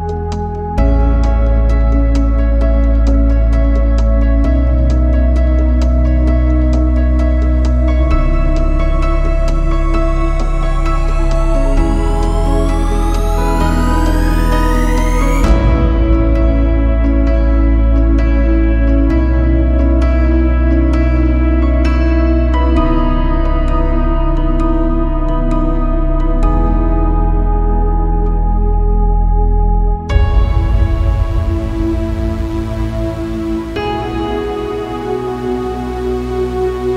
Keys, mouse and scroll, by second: 1.2 z, 1.3 scroll up 2, 1.6 click, 1.9-2.2 middle drag, 2.2 z, 2.3-3.0 middle drag, 3.2-3.8 scroll up 1, 3.8 click, 4.0 click, 4.5 click, 4.6 middle click, 4.9 scroll down 2, 5.1 middle click, 5.4 right click, 5.9-6.6 drag, 6.8 click, 7.2 middle click, 7.9 z, 8.0 middle click, 9.0-9.6 scroll up 2, 9.6 a, 9.8 middle click, 10.1 ctrl+Tab, 10.5 right click, 10.8 z, 11.1 a, 11.2 right click, 11.3 shift+right click, 11.6 x, 12.4 middle click, 13.7 middle click, 14.5 ctrl+Tab, 14.8 scroll up 2, 15.0 middle click, 16.1-16.8 scroll up 2, 16.8 k, 18.1 k, 19.2 click, 19.7 KP_1, 20.0-20.8 scroll down 11, 20.8 KP_1, 21.3 scroll up 12, 21.6 shift+middle click, 22.3 shift+click, 22.7 s, 23.6-24.1 scroll down 1, 24.1 s, 25.0 scroll down 2, 25.1 z, 25.2 middle click, 26.4 scroll down 1, 29.5 middle click, 29.7 a, 29.8 middle click, 30.5 ctrl+s, 30.7 shift+middle click, 32.0 scroll up 4, 32.3 scroll down 2, 32.4 middle click, 33.3-33.7 scroll down 1, 33.7 ctrl+r, 35.2 ctrl+r, 36.6 middle click.